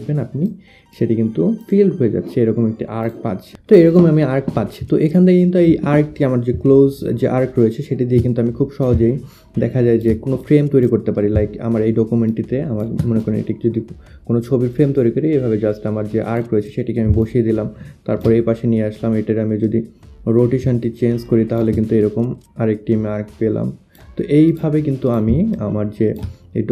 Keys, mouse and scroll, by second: 0.8 click, 1.2 click, 2.6 click, 8.9 click, 10.1 shift+click, 10.5 click, 12.3 shift+click, 17.3 alt+click, 17.6 alt+click, 18.5 click, 19.7 click, 21.8 click, 24.5 click, 25.6 alt+click, 26.0 alt+click.